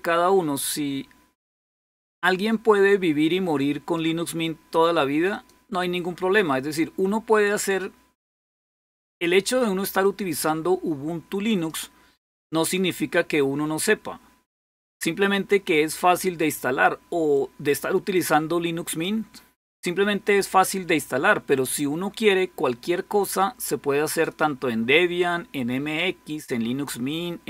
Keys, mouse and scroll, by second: 2.0-4.6 drag, 5.1 click, 6.2-9.1 drag, 9.8-12.3 drag, 12.4 click, 14.5-16.9 drag, 17.1-19.6 drag, 23.9 click.